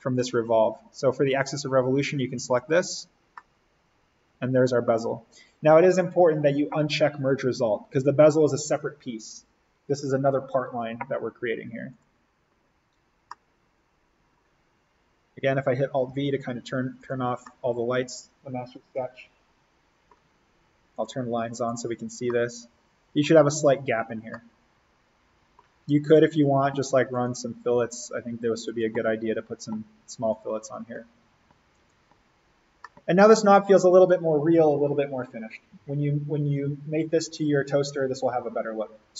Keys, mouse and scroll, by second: 2.4 click, 3.2 scroll up 1, 3.4-4.8 middle drag, 4.8 scroll up 1, 7.2 click, 11.9 click, 13.3-14.9 middle drag, 14.9-16.0 scroll up 1, 16.1 alt+v, 16.6-17.0 scroll down 1, 17.0 click, 17.4-21.0 middle drag, 21.0 click, 22.3-24.2 middle drag, 24.2 scroll down 1, 24.4-27.2 middle drag, 27.2 click, 32.3 scroll up 1, 32.8 middle click, 33.2 scroll.